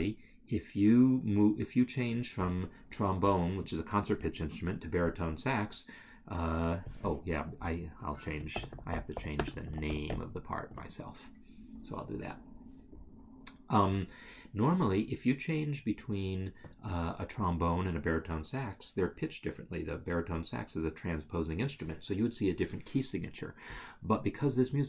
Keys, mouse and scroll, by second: 6.9 click, 7.3 double click, 8.1 ctrl+a, 9.4 space, 9.7 shift+s, 9.9 a, 10.8 Escape.